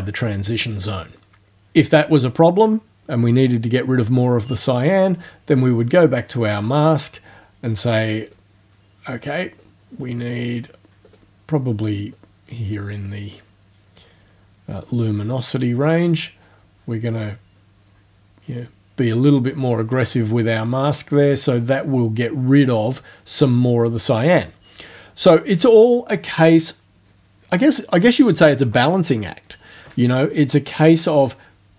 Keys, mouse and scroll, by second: 4.6 click, 5.9 click, 8.3 click, 9.6 click, 11.1 click, 12.2-16.3 drag, 17.2-19.7 drag, 21.6 click.